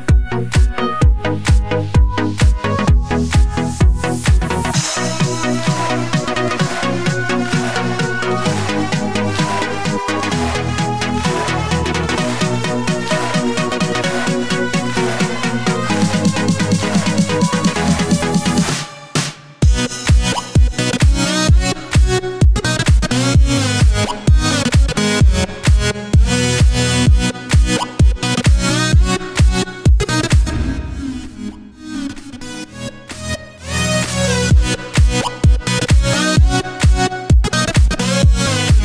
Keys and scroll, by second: 0.0-1.1 typing, 1.8 Down, 2.1 Return, 6.0-7.0 typing, 15.0-16.5 typing.